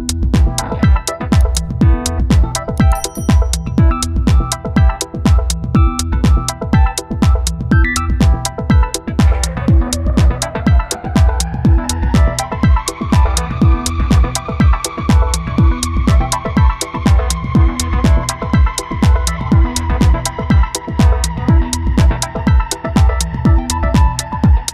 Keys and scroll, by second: 1.9 space, 6.7 space, 9.6 ctrl+z, 16.7 ctrl+z, 21.7 space, 24.5 space.